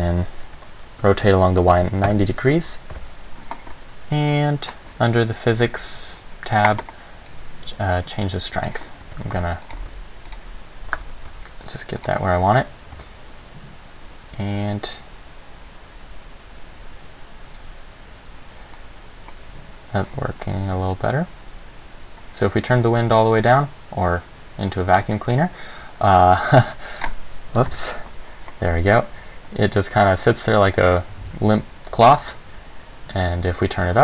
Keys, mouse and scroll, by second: 1.3 r, 3.1 KP_1, 4.9 click, 7.5 click, 9.2 g, 9.9 click, 10.1 r, 10.5 click, 11.0 g, 12.3 click, 13.1 alt+a, 21.1 click, 27.2 click, 32.1 click.